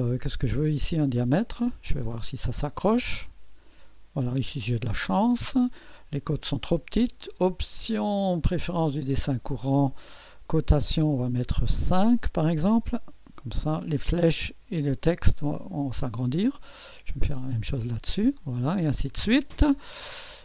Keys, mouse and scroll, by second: 1.5 click, 3.1 click, 4.9 click, 7.2 click, 8.5 click, 10.3 click, 11.6 click, 13.0 KP_5, 14.9 click, 17.3 click, 18.4 click, 18.9-19.6 scroll down 2.